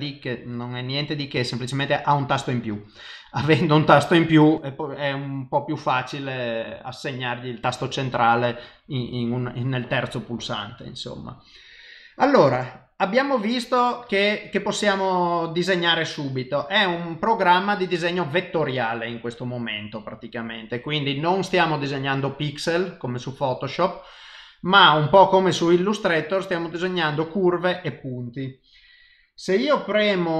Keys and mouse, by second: 14.0 click.